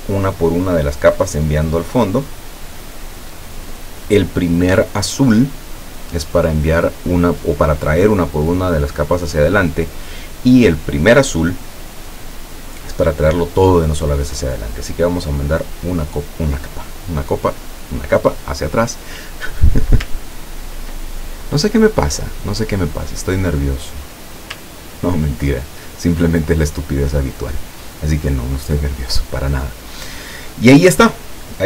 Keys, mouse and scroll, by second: 12.4 click, 15.7 click, 20.3 ctrl+scroll down 2, 21.7 scroll up 2, 22.2 scroll down 2, 23.3-24.3 drag, 24.7 ctrl+scroll down 2.